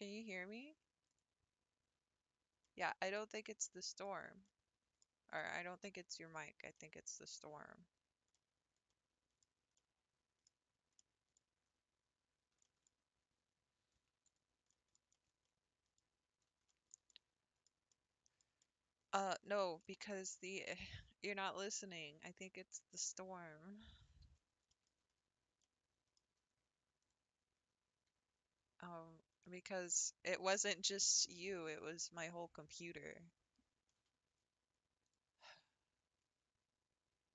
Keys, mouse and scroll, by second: 2.6 middle click, 3.3-3.7 scroll down 4, 3.7 middle click, 4.1 Tab, 4.4 scroll up 1, 4.5-5.0 middle drag, 5.0-5.3 scroll down 2, 5.3-6.3 middle drag, 6.3 scroll down 3, 6.7 middle click, 7.2-7.7 scroll up 4, 8.3 scroll up 1, 8.4-9.4 middle drag, 9.4 scroll down 3, 9.8-10.6 middle drag, 10.6 scroll down 3, 10.9 scroll up 1, 11.0-11.3 middle drag, 11.3-11.9 scroll down 5, 12.4 scroll up 2, 12.6 shift+middle click, 12.9-13.2 scroll down 3, 13.2 Tab, 13.9 Tab, 14.3 click, 14.7-16.2 middle drag, 16.2-16.5 scroll up 3, 16.7-20.5 shift+middle drag, 20.5-21.8 scroll up 1, 24.7-25.3 shift+middle drag, 25.3-25.7 scroll up 1, 25.7-27.1 middle drag, 27.1 click, 27.5 Tab, 28.1 scroll up 2, 28.9-29.4 scroll down 2, 29.4-34.3 middle drag, 35.1 click.